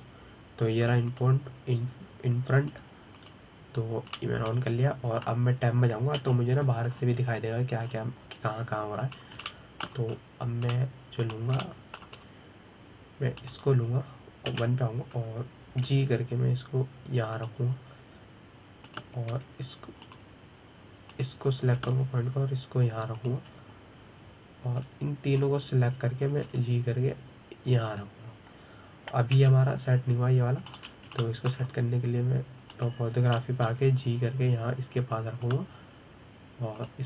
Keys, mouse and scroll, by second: 4.3 click, 4.8 click, 5.8-6.8 middle drag, 6.8 Tab, 7.9 KP_7, 8.6-9.5 scroll up 4, 9.5-10.8 scroll down 2, 10.9 scroll up 1, 11.1-11.8 shift+middle drag, 11.8-12.4 scroll down 3, 12.4-13.9 middle drag, 13.9-15.0 scroll up 2, 15.0 click, 16.2 KP_1, 17.5 g, 20.5 click, 21.0 g, 22.8 click, 23.4 g, 26.5 click, 28.1 g, 29.6 click, 31.0 KP_7, 32.4-32.9 scroll down 3, 32.9 shift+middle click, 33.3-34.4 scroll up 2, 34.4 click, 35.3 g.